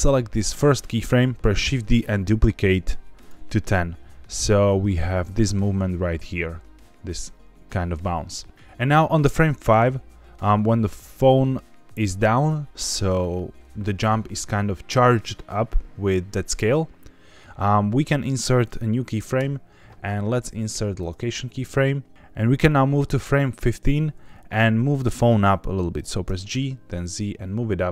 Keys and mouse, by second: 1.5 shift+d, 3.1 click, 3.7-8.5 drag, 9.3-10.3 drag, 22.6-23.8 drag, 26.2 g, 26.5 z.